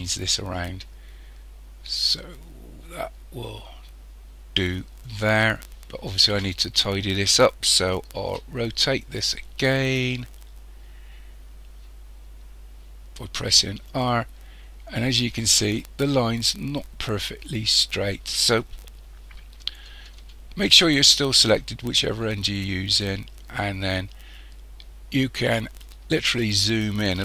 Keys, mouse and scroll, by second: 5.7-6.1 scroll up 3, 8.3 r, 15.0-15.3 scroll up 3, 22.0-24.3 shift+middle drag, 24.3-25.4 scroll up 3, 25.4-25.7 scroll up 2, 26.6-27.2 shift+middle drag.